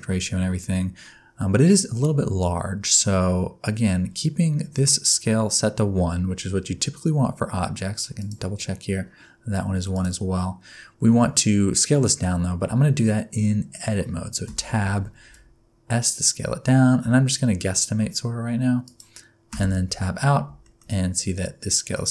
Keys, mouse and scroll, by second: 8.2 click, 9.9 click, 14.5 Tab, 15.2 s, 19.5 Tab, 20.6 shift+middle click, 22.0 middle click.